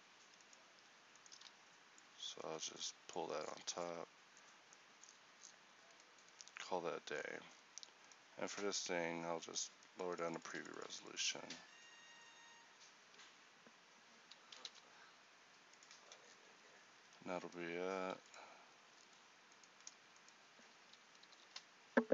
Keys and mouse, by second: 1.5 z, 3.3 Tab, 4.0 a, 14.6 alt+c, 17.0 a, 18.2 x, 21.4 ctrl+j.